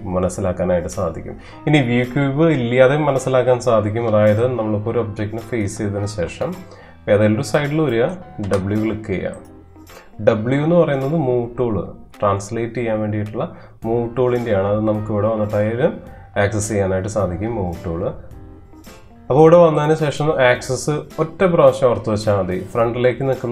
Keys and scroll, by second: 6.2 space, 8.5 w.